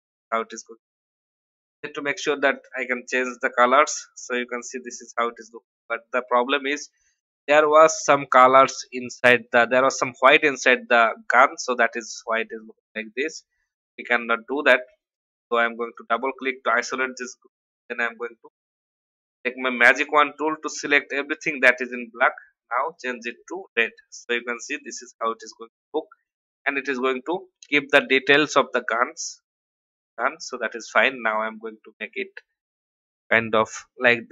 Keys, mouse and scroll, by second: 4.6 alt+scroll up 1, 12.7 ctrl+z, 13.9 click, 17.6 y, 19.9 click, 29.6 y, 30.3-34.3 drag.